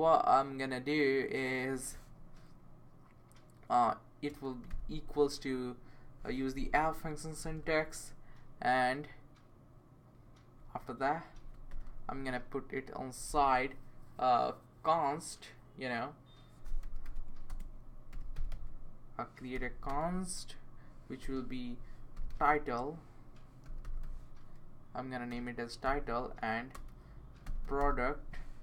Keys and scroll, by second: 4.3 space, 4.7 =, 6.4-7.9 typing, 11.1-11.8 typing, 16.6-20.0 typing, 21.2-28.3 typing.